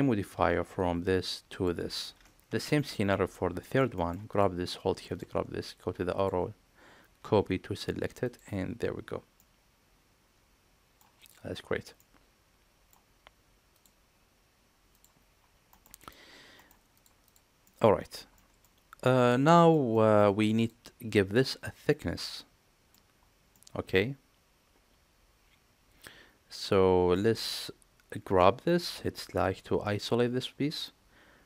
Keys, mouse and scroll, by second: 3.0 middle drag, 3.5 shift+middle drag, 3.8 middle click, 4.2 click, 6.1-8.3 drag, 9.3-10.9 middle drag, 11.1 click, 11.8-12.8 middle drag, 13.6 click, 15.6 middle click, 16.5 middle click, 17.1 click, 17.5 middle drag, 18.2 middle drag, 19.0 middle drag, 19.4 shift+middle drag, 19.8 middle click, 21.2-22.9 middle drag, 23.4-27.0 middle drag.